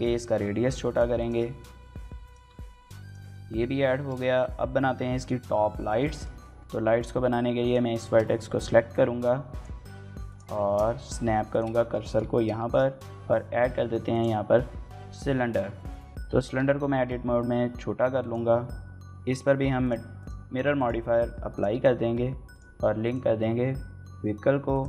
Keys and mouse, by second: 0.4 shift+click, 0.5-2.6 typing, 0.7 click, 1.0 click, 1.5 click, 2.8 Tab, 2.9 click, 3.2 click, 3.8 shift+click, 4.0 click, 5.7 shift+middle click, 6.0 middle click, 6.3 Tab, 6.6 middle click, 7.0 1, 7.8 shift+s, 10.1 click, 10.5 shift+s, 11.6 shift+click, 12.0 Tab, 12.4 shift+a, 16.2 Tab, 16.7 s, 18.0 click, 19.6 click, 20.6-21.4 drag, 22.3 click, 24.5 click.